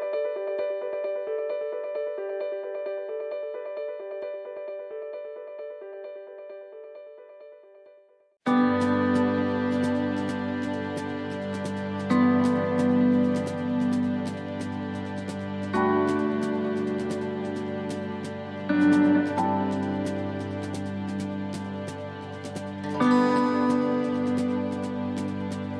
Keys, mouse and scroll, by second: 0.5 middle click, 0.5 s, 1.2-1.8 scroll up 1, 1.8 right click, 2.2 middle click, 3.1 shift+right click, 3.7 right click, 4.1 middle click, 4.9 shift+right click, 5.2 middle click, 6.9 shift+right click, 7.4 middle click, 8.3 shift+right click, 8.7 middle click, 9.9 middle click, 11.0 middle click, 13.7 u, 15.1 middle click, 17.9 scroll down 2, 18.3 middle click, 18.6-18.9 scroll down 1, 19.0 middle click, 19.9 middle click, 21.1 shift+middle click, 21.1 shift+middle click, 22.1 middle click, 22.9 shift+middle click, 23.9 shift+middle click, 24.3-24.7 scroll up 2.